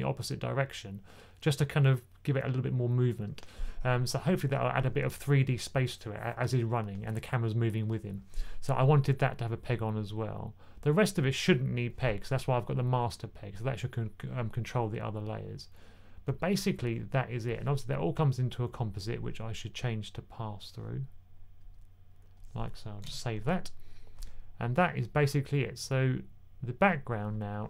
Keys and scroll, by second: 22.9 super+s.